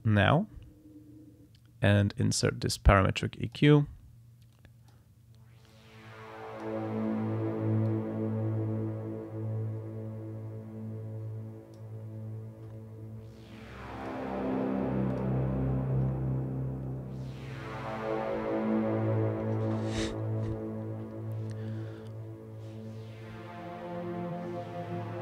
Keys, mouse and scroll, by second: 2.4 click, 3.5 click, 4.5 click, 5.7-7.0 drag, 7.9-11.9 drag, 14.0 click, 15.1 click.